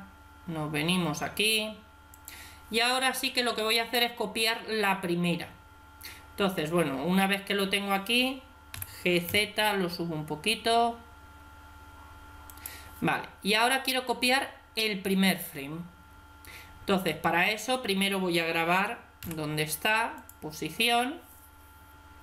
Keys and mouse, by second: 8.6 g, 19.1 i.